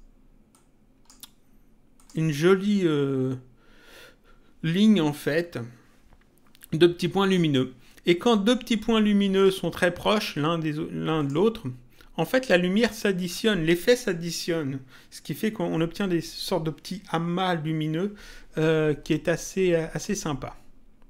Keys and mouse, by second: 0.5 click, 1.9 click, 11.2 click.